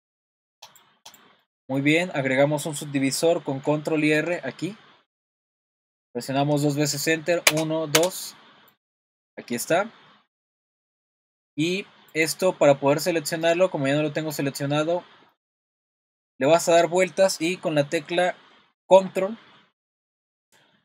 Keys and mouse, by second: 1.4 middle click, 4.1 super+r, 7.9 Return, 9.2 middle click, 12.1 click, 15.3 middle click, 16.5-19.1 middle drag.